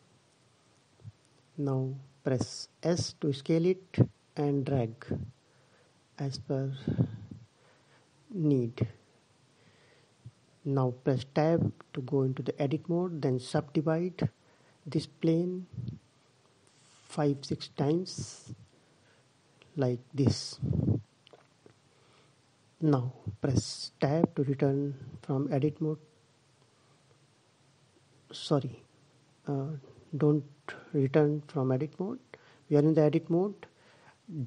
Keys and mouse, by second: 2.6 s, 9.7 Tab, 11.6-12.9 middle drag, 13.0 middle click, 13.2 middle click, 13.7-20.2 drag, 20.3 click, 23.6 a, 28.7-30.2 middle drag.